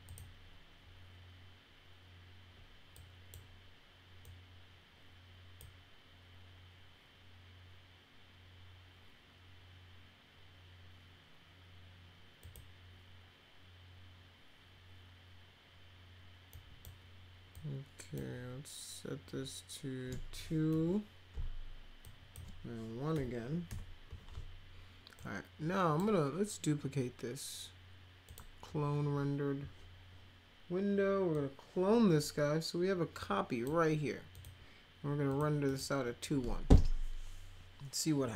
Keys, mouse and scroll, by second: 0.0 click, 2.9 click, 4.2-5.6 drag, 12.4 click, 16.5 click, 17.5 click, 20.7 2, 22.0 click, 25.2 click, 28.2 click, 31.3-33.6 drag, 34.3 click, 35.3 click, 35.7 click.